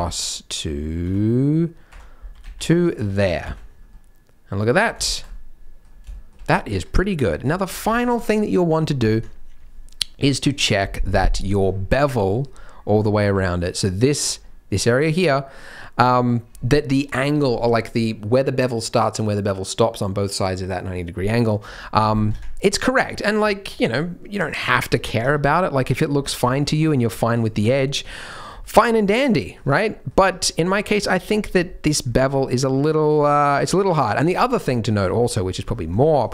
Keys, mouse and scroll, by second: 2.3 g, 2.9 Tab, 3.1-3.9 scroll down 6, 3.4 z, 3.9 middle click, 4.8 scroll down 2, 5.0 shift+middle click, 5.3 middle click, 6.1 shift+middle click, 6.5 scroll up 1, 6.7 Tab, 7.0 middle click, 7.5 shift+middle click, 22.6-23.0 scroll down 3, 22.9-23.4 scroll up 5, 23.4 shift+middle click, 24.6 click, 25.2 Tab, 25.4 KP_Decimal, 26.1 Tab, 26.1-27.3 scroll up 4, 26.4 shift+middle click, 27.3 click, 27.3-28.0 scroll up 1, 28.0 KP_Decimal, 28.6-28.9 scroll down 4, 28.9 middle click, 29.6 Tab, 29.9 middle click, 30.2 Tab, 30.3-30.8 scroll down 3, 30.7 middle click, 30.7-31.4 scroll up 4, 31.4 Tab, 31.6 middle click, 32.1 middle click, 33.6 middle click, 33.9 middle click, 34.2 Tab, 34.4-34.8 scroll down 4, 34.7 middle click, 35.1-35.4 scroll up 1, 35.4-36.1 scroll down 6, 36.0 middle click.